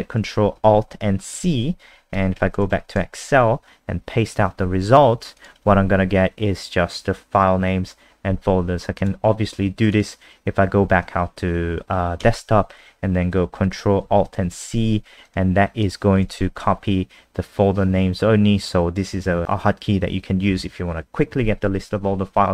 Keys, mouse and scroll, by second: 2.1-3.3 typing, 5.4 click, 5.7 ctrl+v, 9.0 click, 12.2 ctrl+a, 15.3 click, 16.3 ctrl+v.